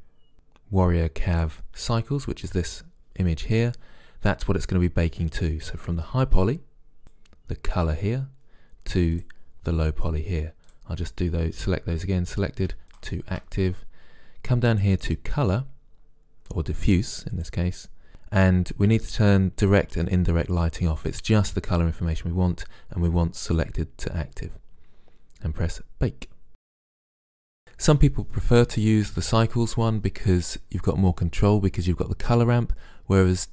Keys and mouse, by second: 7.0-9.0 drag, 9.2-12.6 drag, 13.0-16.6 drag, 19.6-22.0 drag, 23.6-25.4 drag, 26.5 click.